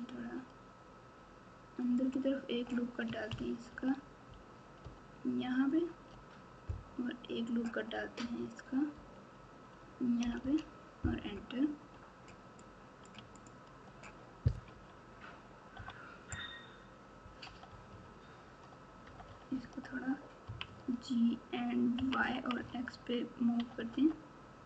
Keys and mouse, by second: 3.6 ctrl+r, 8.9 ctrl+r, 12.6 click, 13.3 alt+click, 14.6 KP_7, 15.7 KP_9, 17.4 KP_8, 17.6 KP_8, 17.8 KP_8, 19.0 KP_8, 19.2 KP_8, 20.4 KP_6, 20.6 KP_6, 22.2 KP_6, 22.5 KP_6, 23.5 KP_8, 23.7 KP_8.